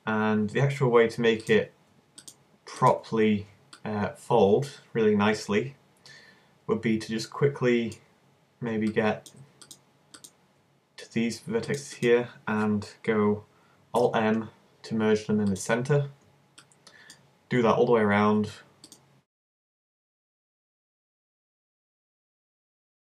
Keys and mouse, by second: 9.7-14.0 middle drag, 14.0 alt+m, 16.6 click, 17.6-18.9 middle drag, 18.9 right click, 19.7 alt+m, 21.1 alt+m, 21.7 right click, 22.2 alt+m.